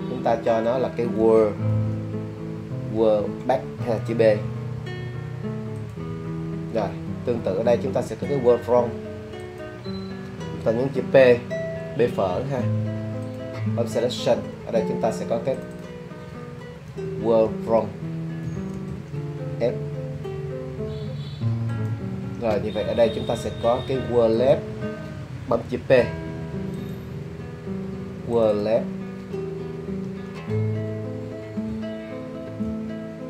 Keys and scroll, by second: 0.3 w, 1.2 a, 1.7 l, 1.8 l, 3.2 -, 4.5 b, 12.4 p, 16.9 w, 17.5 a, 18.4 l, 18.6 l, 19.8 -, 26.0 p, 30.0 w, 30.5 a, 31.7 ;, 32.6 BackSpace.